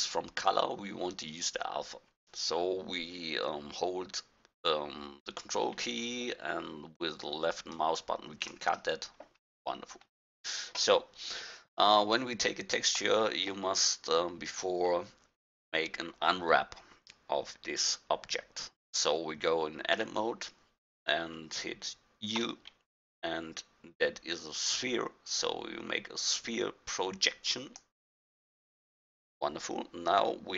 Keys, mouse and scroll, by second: 0.2-1.3 middle drag, 7.8-9.3 drag, 9.4 click, 9.6-10.1 middle drag, 9.6-10.1 scroll down 1, 15.0 middle click, 20.0 Tab, 22.4 u.